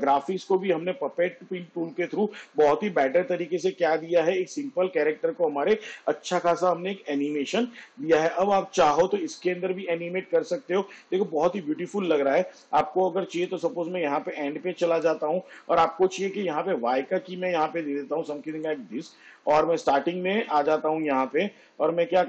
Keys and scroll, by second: 12.5 space.